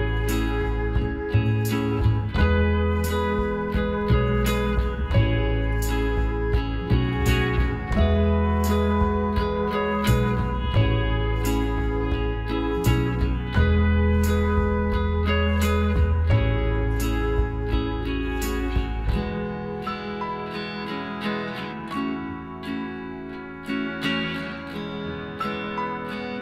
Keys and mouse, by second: 3.1 k, 7.1 k, 10.5-14.3 middle drag, 14.3 Tab, 15.3 right click, 15.5 Tab, 17.2-19.0 drag, 19.4 KP_Divide, 20.6-22.2 right drag, 21.4 KP_Decimal, 22.2-24.0 middle drag, 24.0-26.4 right drag, 25.5-26.4 middle drag.